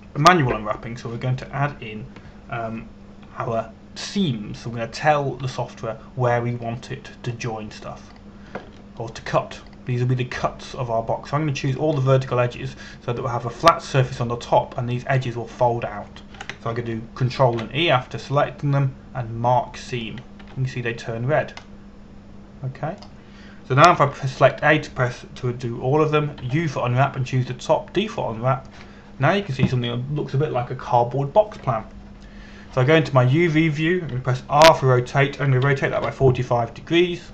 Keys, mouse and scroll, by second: 7.1 a, 9.7 right click, 11.3 shift+right click, 12.0 shift+right click, 13.3 shift+right click, 19.1 e, 21.6 click, 22.0 a, 23.3 middle click, 25.6 a, 28.0 u, 29.7 click, 36.2 r.